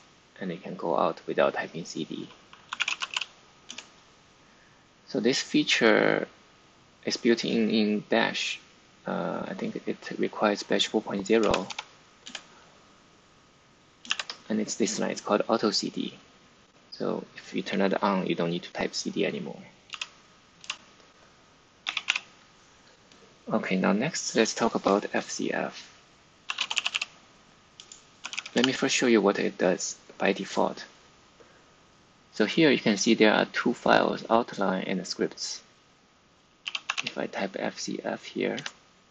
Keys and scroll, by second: 2.4-3.5 typing, 3.6 Return, 11.3 typing, 12.1 Return, 14.0 shift+v, 19.8 v, 21.5-22.5 typing, 23.7-24.8 typing, 26.1-28.6 typing, 27.7 Return, 36.3-37.3 typing, 38.5 Return.